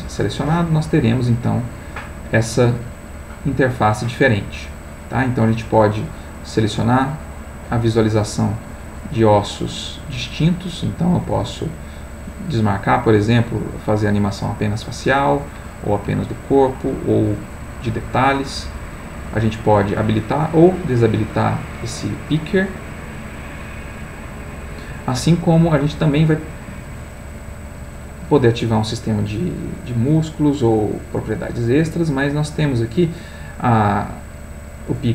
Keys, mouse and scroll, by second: 0.8 click, 1.7-3.4 drag, 6.4 click, 8.5 click, 9.1 click, 9.8 click, 11.3 click, 11.8 click, 13.2 middle click, 15.4 click, 15.9 click, 19.1 click, 20.2 click, 20.9 click, 23.4 click, 24.0 click, 32.4 click, 33.7 click.